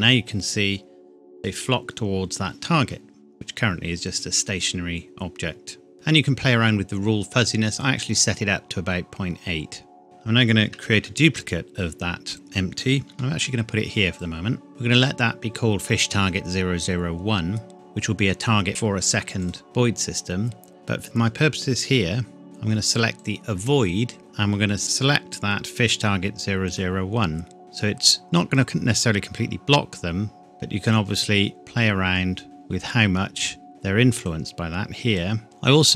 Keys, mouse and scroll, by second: 7.8 click, 11.0 shift+d, 12.3 click, 13.1 g, 14.2 click, 19.4 click, 20.8-21.5 scroll down 1, 23.2 click, 24.2-24.8 scroll down 1, 24.8 click, 26.8 click, 30.9 click, 34.2 click.